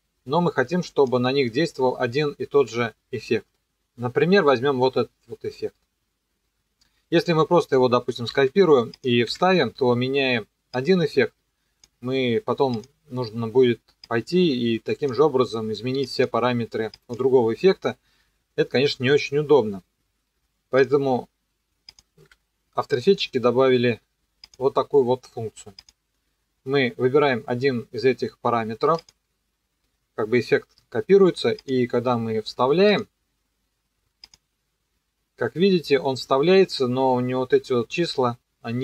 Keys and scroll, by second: 8.3 ctrl+c, 9.3 ctrl+v, 22.2 Delete.